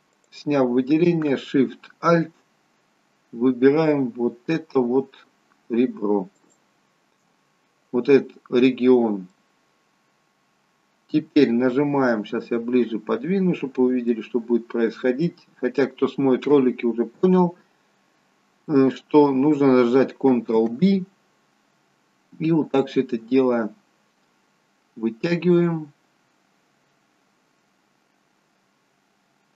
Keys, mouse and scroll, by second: 6.3 alt+shift+click, 9.2 middle click, 13.2-13.9 scroll down 2, 14.2 shift+middle click, 15.4 middle click, 22.2 ctrl+b.